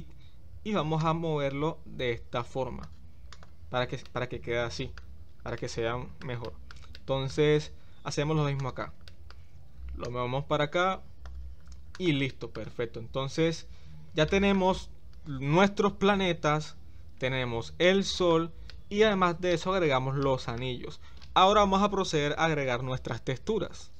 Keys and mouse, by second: 1.1-2.8 drag, 4.0-4.9 middle drag, 5.5-6.2 shift+middle drag, 6.4-6.7 middle drag, 6.9-7.3 shift+middle drag, 9.1 shift+middle click, 10.2-11.3 drag, 11.9 click, 12.3 middle click, 14.3 middle drag, 17.8-18.3 shift+middle drag, 18.7-19.1 middle drag, 19.5-19.8 middle drag, 20.2-20.6 shift+middle drag.